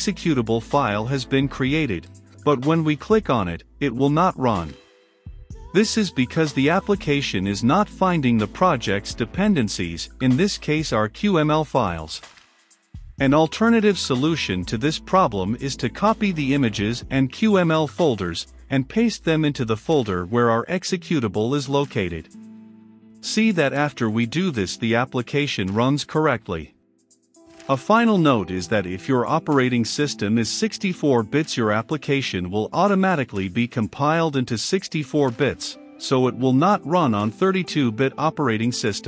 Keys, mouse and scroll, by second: 4.0 F5, 4.4-12.9 drag, 13.9 ctrl+click, 14.6-15.6 right drag, 14.8 click, 15.7-17.1 drag, 17.1 right click, 18.0-24.6 drag, 24.3-26.0 typing, 26.3-37.7 drag, 38.8 click.